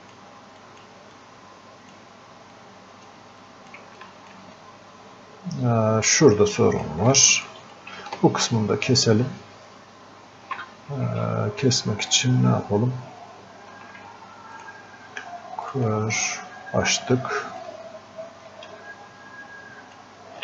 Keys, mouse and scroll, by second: 4.0 alt+click, 4.6-7.2 drag, 7.2 alt+click, 7.8-11.0 drag, 11.4-18.8 drag, 18.8 ctrl+shift+space.